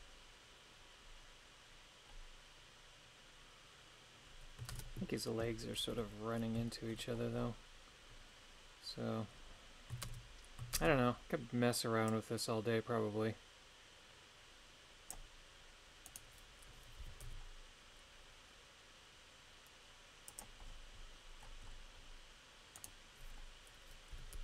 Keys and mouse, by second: 4.7 shift+space, 5.9 KP_3, 6.7 shift+middle click, 10.1 shift+space, 10.7 shift+space, 12.1-15.2 drag, 16.1 right click, 17.0 g, 17.2 y, 20.3 click, 22.8 right click, 24.1 g, 24.3 y.